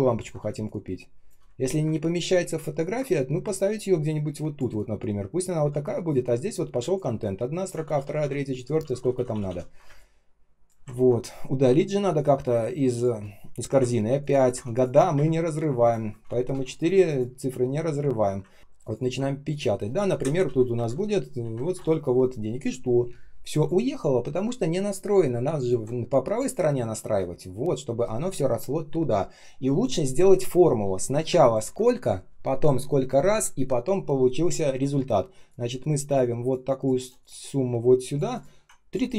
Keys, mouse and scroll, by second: 0.1 ctrl+scroll down 1, 0.3 space, 0.9 space, 0.9 space, 1.5-2.0 ctrl+scroll up 1, 2.0 ctrl+shift+3, 2.7 ctrl+click, 7.1 alt+click, 7.7 ctrl+в, 9.8 space, 10.3 space, 10.8-11.6 ctrl+scroll up 1, 11.9 space, 12.4 space, 14.1 ctrl+click, 14.3 ctrl+click, 15.1 Delete, 16.4 BackSpace, 18.5 ctrl+click, 18.7 ctrl+click, 18.9 ctrl+click, 20.1 Left, 20.7 shift+Right, 21.0-22.1 typing, 31.3 ctrl+click, 36.4 shift+click.